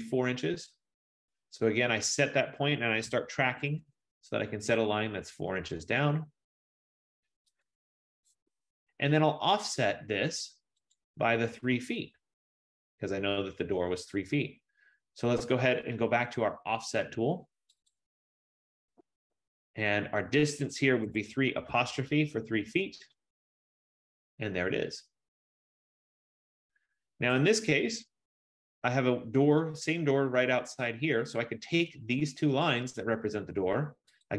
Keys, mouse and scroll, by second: 3.2 4, 3.7 shift+', 3.9 Return, 7.7 click, 8.6 Return, 8.9 F15, 11.0 click, 12.0-12.7 scroll, 14.2 scroll, 18.2 click, 21.2-21.8 typing, 22.5 Return, 24.2 click, 25.0-27.5 scroll, 27.5 Return, 32.7 click.